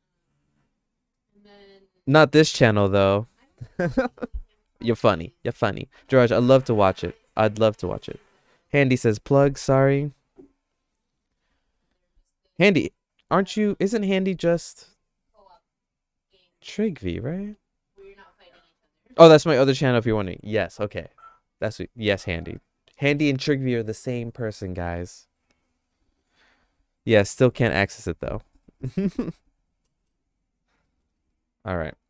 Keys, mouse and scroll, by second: 30.8 middle click, 31.2-32.0 shift+middle drag.